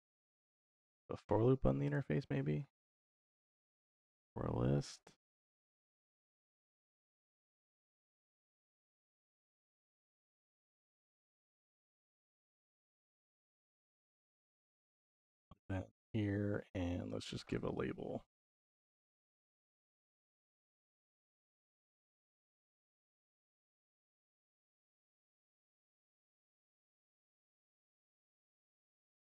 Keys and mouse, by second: 3.4 click, 3.6-4.9 drag, 5.1-5.6 drag, 6.0 click, 6.5 click, 7.2 click, 8.4 middle click, 9.1-10.2 drag, 11.3 click, 11.8 ctrl+s, 12.8-14.2 drag, 16.1 middle click, 17.2 shift+a, 20.5-22.3 drag, 23.5 middle click, 24.5-25.7 drag, 28.0 click.